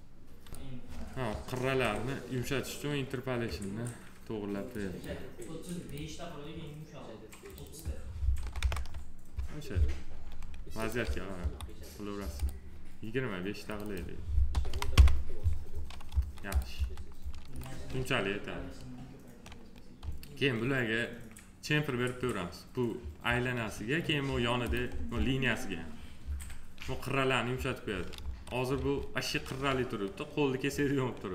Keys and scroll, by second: 8.4 2, 8.6 Return, 11.3 F4, 14.5 2, 14.9 Return, 16.1 F4, 28.2 F4.